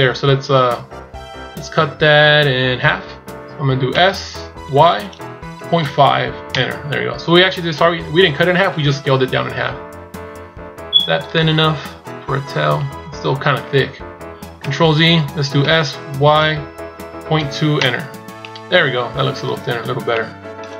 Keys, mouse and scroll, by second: 9.5-10.8 scroll up 5, 10.8-11.2 scroll down 2, 11.2 middle click, 13.0 scroll down 1, 14.5 ctrl+z, 15.4 s, 18.2 middle click.